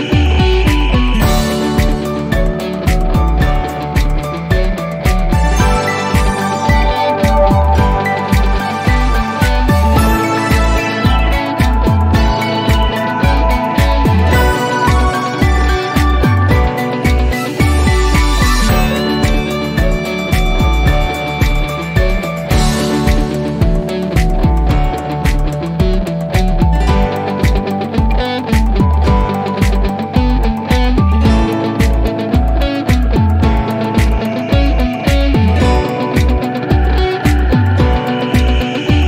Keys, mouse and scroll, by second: 2.6 Return, 4.5 click, 7.0 typing, 8.1 Return, 11.9 click, 17.2 click, 20.1 click, 23.5 click, 29.7 ctrl+click, 30.1 ctrl+click, 32.0 F3, 33.0 ctrl+click, 34.4-38.6 drag.